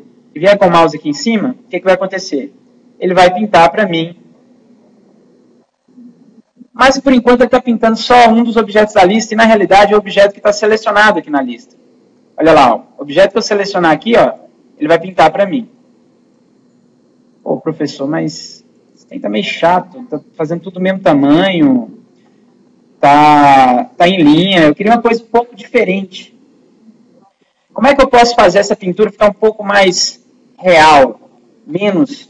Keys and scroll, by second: 27.5 ctrl+z.